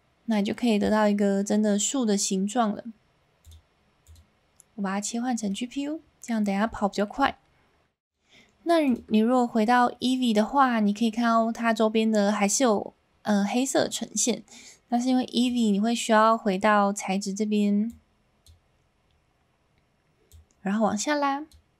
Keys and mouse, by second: 3.4-4.2 drag, 5.6 middle click, 6.8 shift+middle click, 8.8 click, 17.8 click, 20.3-21.6 drag.